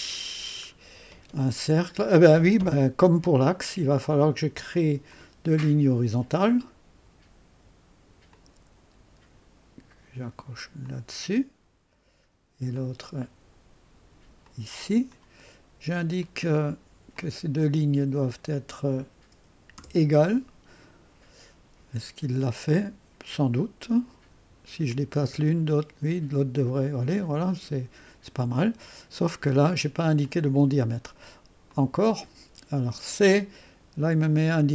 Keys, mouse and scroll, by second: 5.1 click, 8.3 click, 8.6 click, 10.8 click, 12.7 click, 14.4-15.5 drag, 15.3 middle click, 15.3 right click, 16.2-17.3 drag, 18.5 click, 24.9-28.8 drag, 30.2 click, 31.7 click.